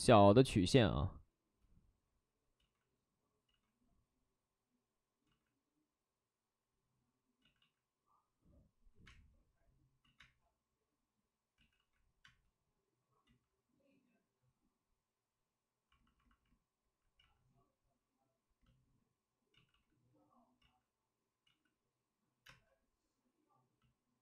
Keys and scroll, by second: 0.0 b, 0.7 space, 2.5 ctrl+z, 2.5 space, 7.2 ctrl+z, 7.4 ctrl+z, 7.5 ctrl+z, 8.9 ctrl+z, 9.0 space, 10.0 ctrl+z, 10.2 space, 11.5 ctrl+z, 12.2 space, 13.2 ctrl+z, 17.1 ctrl+z, 19.5 ctrl+z, 19.6 ctrl+z, 21.4 ctrl+z, 22.4 space.